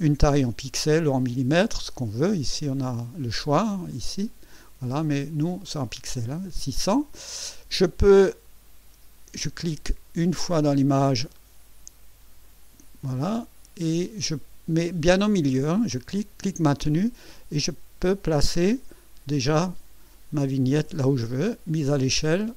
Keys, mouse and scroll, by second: 3.9 click, 11.3 click, 12.4-14.3 drag, 16.1-21.0 drag, 22.1 click.